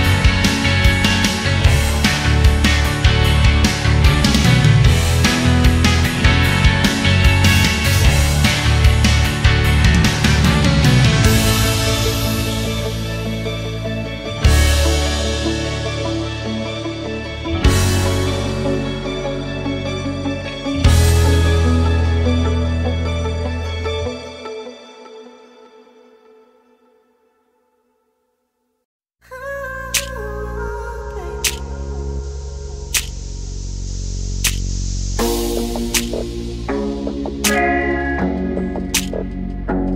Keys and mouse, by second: 4.4 middle click, 6.7 click, 11.2 click, 12.4 shift+d, 14.2 drag, 15.7-16.7 drag, 20.0 click, 22.4 click, 23.1 click, 24.1-25.4 middle drag, 26.7-28.0 drag, 28.8 ctrl+shift+click, 30.8-32.3 drag, 33.2 click, 34.2 ctrl+shift+click.